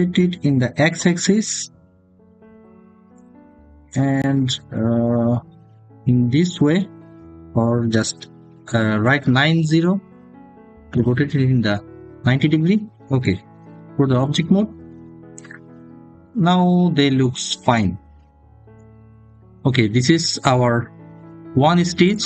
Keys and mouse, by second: 1.1 x, 9.2 9, 9.6 0, 10.7 Return, 14.3 Tab.